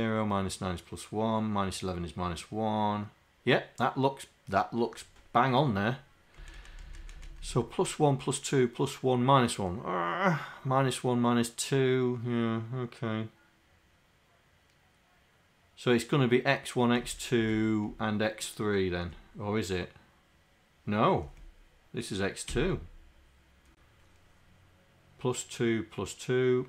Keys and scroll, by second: 6.4 Up, 6.8 Up, 7.3 Up, 17.1 Up, 17.5 Up, 17.9 Right, 21.3 Left, 22.5 Delete, 22.6 2.